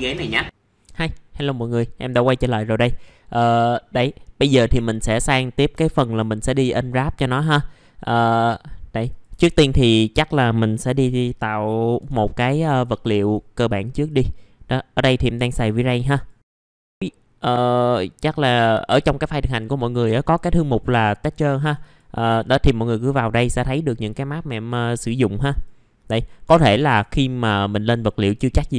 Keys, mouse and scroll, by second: 0.4 click, 4.2 alt+middle click, 5.3-5.7 scroll down 1, 5.8 alt+middle click, 6.5 click, 7.8-8.1 scroll up 1, 8.1 right click, 9.0 click, 9.4 alt+middle click, 9.9 middle click, 10.4-11.5 drag, 11.9 m, 12.7 right click, 13.1 click, 16.9 middle click, 24.2-25.3 drag.